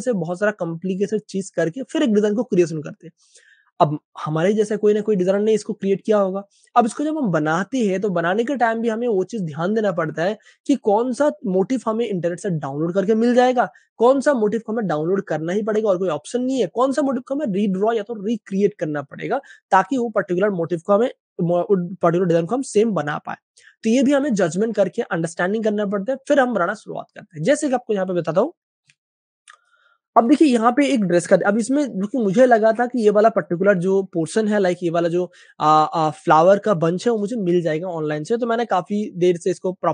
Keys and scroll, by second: 29.0 space, 31.5 super+space, 31.6 super+space, 32.8 super+space, 35.0 space, 35.1 space, 35.2 space.